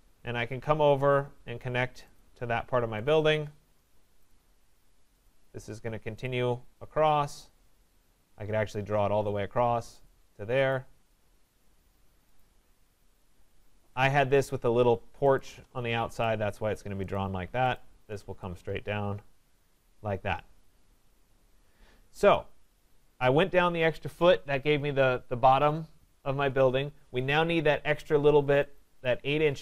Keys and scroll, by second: 11.7 Return, 13.3 Return.